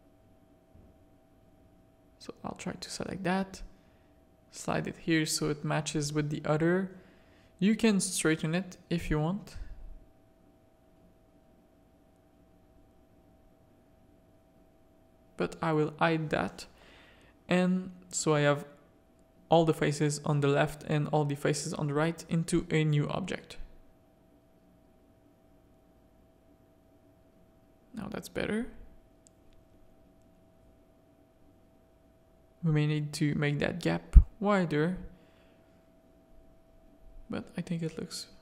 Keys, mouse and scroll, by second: 0.3 z, 0.8 z, 1.5 click, 2.5 z, 3.0 g, 5.7 middle click, 7.1 shift+middle click, 7.6 z, 8.8 z, 12.5 h, 13.5 z, 13.7 a, 14.4 click, 15.1 z, 15.9 alt+h, 17.4-18.3 drag, 20.0 ctrl+r, 21.7 Tab, 22.0 click, 22.2 Tab, 22.7 ctrl+r, 26.0 Tab, 26.4 alt+a, 26.8 z, 28.6 KP_0, 30.8 z, 32.1-33.7 shift+drag, 34.8 click.